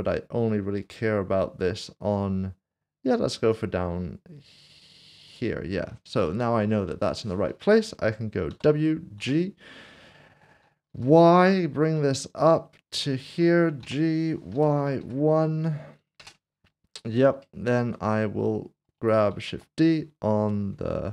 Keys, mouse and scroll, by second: 5.3 click, 6.3 shift+middle click, 8.5-9.2 typing, 10.9 typing, 13.1 ctrl+click, 13.8-15.0 typing, 16.2 Return, 17.0 scroll down 1, 17.5 shift+middle click, 19.3 typing.